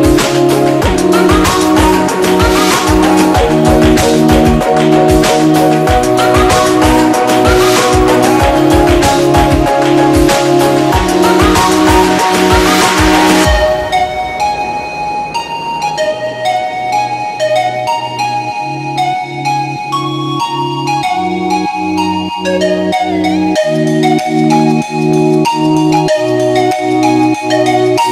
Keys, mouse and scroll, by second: 0.8 ctrl+=, 1.4 space, 1.5 click, 1.7 space, 1.9 click, 2.2 space, 2.3 click, 2.9-5.9 drag, 6.7 ctrl+-, 8.1 space, 8.3 click, 8.5 space, 10.2-11.4 drag, 15.3 space, 15.6 drag, 18.3 click, 19.3-21.4 drag, 21.8 space, 22.0 click, 22.2-22.6 space, 23.7-24.2 drag.